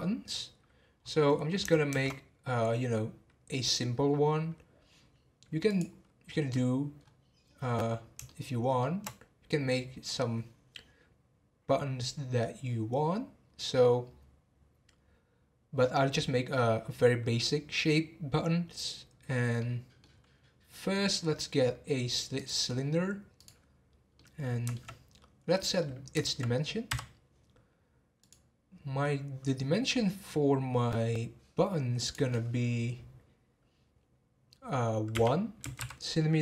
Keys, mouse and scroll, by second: 0.2 scroll up 1, 1.9 shift+a, 6.3-6.9 scroll down 11, 6.9 scroll up 1, 7.5-8.2 scroll up 4, 8.2-11.5 shift+middle drag, 19.5-20.1 middle drag, 20.1 scroll down 1, 20.9-22.3 middle drag, 22.3-24.1 drag, 24.1-25.4 middle drag, 25.4 scroll up 1, 25.8-26.8 middle drag, 26.8 n, 28.2 click, 32.0-35.1 drag.